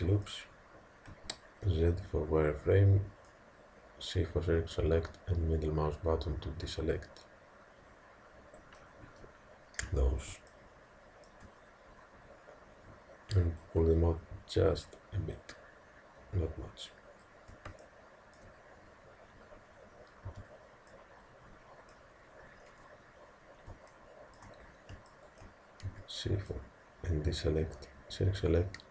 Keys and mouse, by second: 1.1 z, 2.7 c, 10.5-13.6 middle drag, 13.6 click, 17.9-20.3 middle drag, 20.3 c, 24.0-26.8 middle drag, 25.9 c.